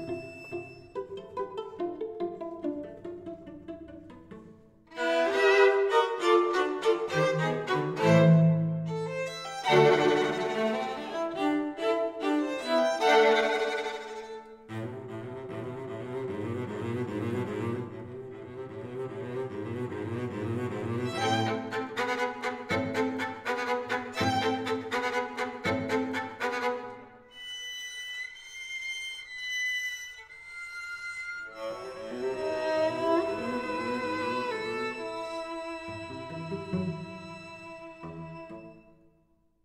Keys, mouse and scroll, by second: 3.4 KP_1, 4.5 KP_3, 6.6-8.9 drag, 10.3 s, 12.0-16.3 drag, 17.0 w, 20.3 s, 23.5 ctrl+z, 24.2 ctrl+z, 26.0 Tab, 28.0 Tab, 28.6-30.9 right drag, 30.3 a, 30.9 a, 31.5 a, 34.6 ctrl+z, 35.0 ctrl+z, 35.2 ctrl+z, 35.5 ctrl+z, 35.8 ctrl+z, 36.1 ctrl+z, 36.6 ctrl+z, 37.1 ctrl+z, 37.5 ctrl+z, 38.4 ctrl+z, 39.3 Tab.